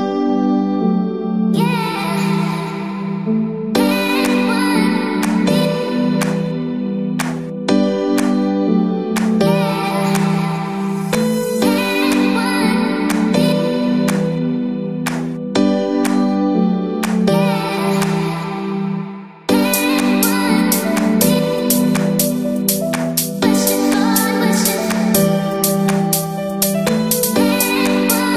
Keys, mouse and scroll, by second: 0.0-4.5 typing, 0.4 click, 0.5 shift+click, 1.3 click, 5.8-7.6 typing, 6.9 scroll down 1, 7.0 middle click, 7.6 scroll down 3, 7.8 shift+middle click, 7.9 scroll up 1, 8.9 click, 9.2 shift+click, 9.5-17.3 typing, 10.1 scroll up 1, 11.4 click, 13.7 shift+middle click, 16.6 click, 17.0 click, 18.3 click, 18.5-28.3 typing, 20.8 shift+middle click, 25.5 click, 27.0 click.